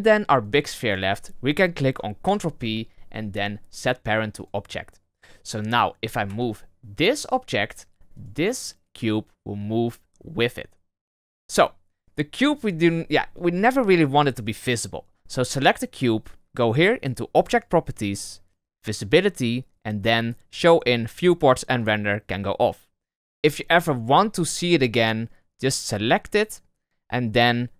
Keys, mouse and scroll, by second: 0.4 shift+right click, 2.2 ctrl+p, 5.1 right click, 6.3 g, 8.1 right click, 12.5 right click, 12.8 g, 14.5 right click, 17.5 click, 18.8-21.1 drag, 21.8 click.